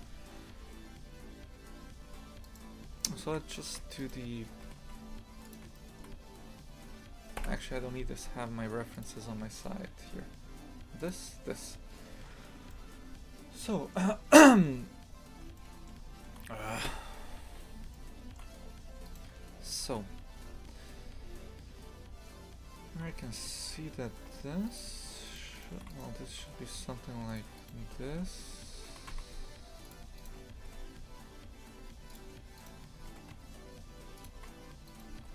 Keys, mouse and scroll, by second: 0.3-2.5 scroll up 1, 2.5 right click, 3.0 shift+middle click, 4.0 right click, 4.7 g, 5.8-7.4 shift+middle drag, 7.4 Delete, 14.9-15.4 scroll up 2, 15.6-16.9 middle drag, 16.9 KP_3, 17.9-18.6 shift+middle drag, 18.6-18.9 scroll up 2, 19.1 right click, 19.3 Tab, 23.1 1, 23.4 right click, 24.7 right click, 25.3 shift+right click, 25.6 shift+right click, 25.9 right click, 26.4 g, 27.6 right click, 27.9 g, 30.2 right click, 30.6 g, 32.6 right click, 33.0 g, 34.9 right click, 35.2 g.